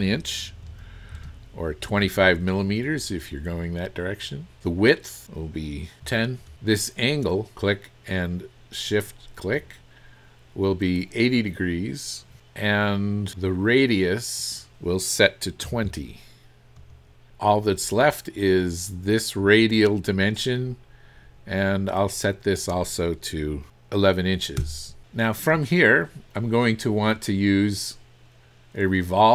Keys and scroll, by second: 0.7 KP_1, 1.2 Return, 6.1 KP_1, 6.5 KP_0, 15.7 KP_2, 16.8 KP_2, 16.8 KP_0, 24.6 Return.